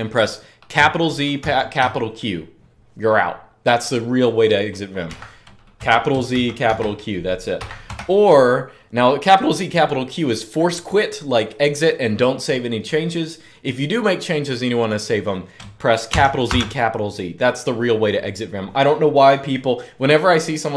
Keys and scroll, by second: 0.5 shift+z, 1.1 shift+q, 4.8 Up, 5.5 Return, 6.1 shift+z, 6.4 shift+q, 7.3 Up, 7.6 typing, 15.6-16.7 typing, 20.6 Up.